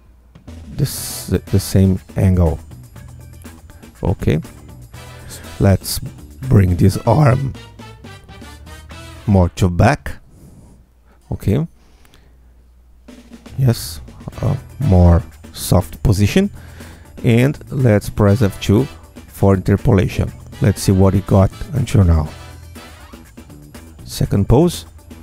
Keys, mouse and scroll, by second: 3.0 alt+click, 3.7 click, 4.7 click, 7.8 alt+q, 7.9 alt+click, 9.5 alt+click, 10.4-11.7 alt+drag, 12.7-15.0 alt+drag, 15.8 click, 17.3 ctrl+a, 18.9 F2, 20.5 Tab, 20.9-25.2 drag.